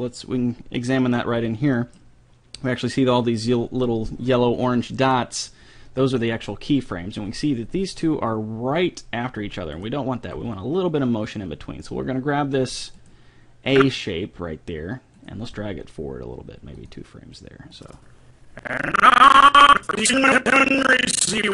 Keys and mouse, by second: 0.8-2.4 middle drag, 6.9 middle click, 9.7-11.5 right drag, 10.3 g, 13.7 click, 13.9-16.9 right drag, 15.2 click, 15.5 g, 17.9-19.7 drag.